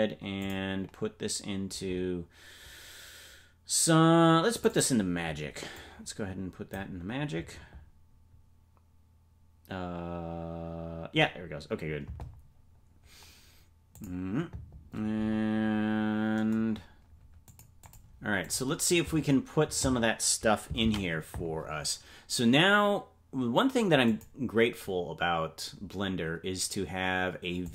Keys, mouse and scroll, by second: 23.2 ctrl+s, 24.1 click.